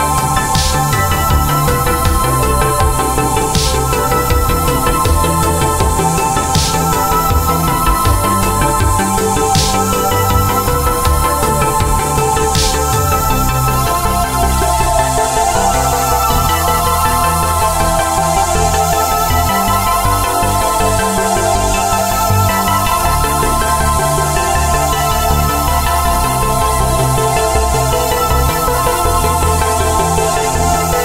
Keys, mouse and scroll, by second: 23.6 click, 25.3 click, 28.3 click, 29.6 click, 30.9 click.